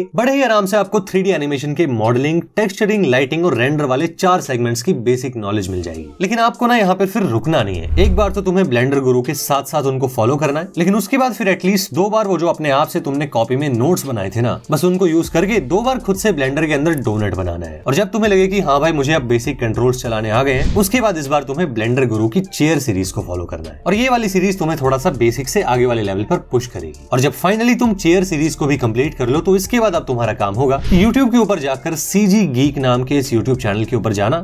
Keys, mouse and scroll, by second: 0.2 Tab, 0.7 Tab, 1.2 click, 2.2 s.